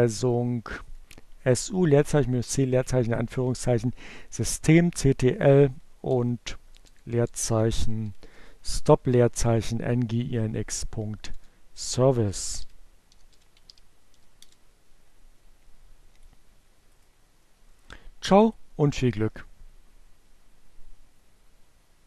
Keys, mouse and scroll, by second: 1.6 Left, 2.7 BackSpace, 3.8-5.3 typing, 6.7 Return, 7.4-9.8 typing, 11.5 click, 12.1 right click, 14.6 click.